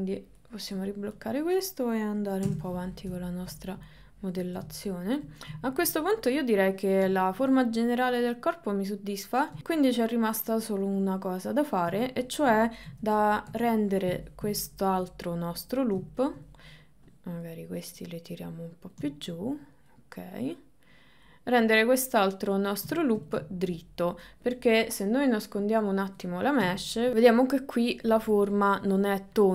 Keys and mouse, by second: 0.5 click, 2.5 Tab, 3.5 shift+middle click, 4.8 shift+middle click, 5.7 ctrl+middle click, 7.3 ctrl+middle click, 7.6-9.3 middle drag, 9.6-11.9 middle drag, 12.1 ctrl+middle click, 12.9 KP_1, 13.5 KP_3, 14.7 ctrl+middle click, 16.4 middle click, 17.2 click, 18.1 click, 19.7 click, 20.5 click, 23.1 shift+middle click, 23.5 ctrl+middle click, 25.9 click, 26.9-29.5 ctrl+middle drag.